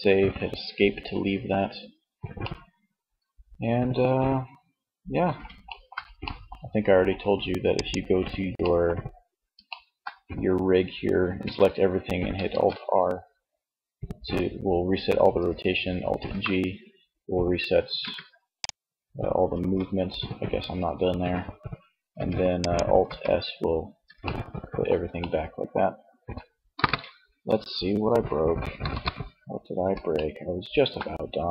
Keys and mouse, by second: 10.3 a, 11.5 alt+r, 15.4 alt+g, 16.9 g, 17.5-19.4 drag, 18.6 alt+g, 21.2 s, 21.5 click, 22.1 alt+s, 25.8 KP_1, 27.9 KP_3, 30.5 g.